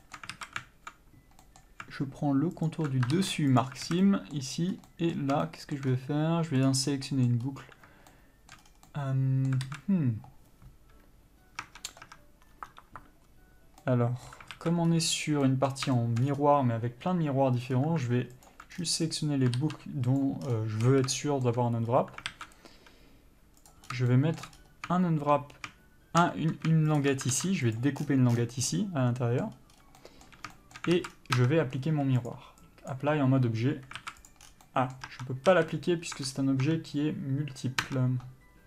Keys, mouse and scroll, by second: 0.1 scroll up 1, 0.3 shift+middle click, 0.6 alt+a, 1.8 middle click, 3.0 alt+click, 3.9 ctrl+e, 4.2 alt+a, 4.3 middle click, 4.8-5.2 scroll up 1, 5.2 middle click, 5.7 shift+middle click, 6.9 click, 7.2 scroll down 1, 7.4 middle click, 7.7-8.4 scroll up 1, 8.4 shift+middle click, 8.9 scroll down 1, 9.2 middle click, 10.0 alt+a, 11.9 Tab, 14.1 middle click, 14.8 alt+a, 15.2-15.8 scroll up 1, 15.8 middle click, 16.3 shift+middle click, 16.6 scroll up 1, 18.8 alt+click, 19.0 scroll down 1, 20.5 ctrl+e, 20.8-21.1 scroll down 1, 21.1 a, 21.5 shift+middle click, 22.2-22.6 scroll up 1, 22.6 alt+a, 23.9 click, 24.2 scroll up 1, 24.4 shift+middle click, 24.9 scroll up 1, 27.3 shift+click, 28.1 ctrl+e, 28.3 scroll down 1, 29.0 middle click, 29.9 scroll up 1, 30.3 middle click, 30.8 shift+middle click, 31.3 alt+a, 31.4 scroll down 1, 31.7 Tab, 34.3 alt+a, 34.6 click, 34.7 scroll down 1, 35.0 middle click, 35.4 Tab, 35.8 a, 36.0-36.4 scroll up 1, 36.4 Tab, 36.5 scroll down 1, 37.0 Tab.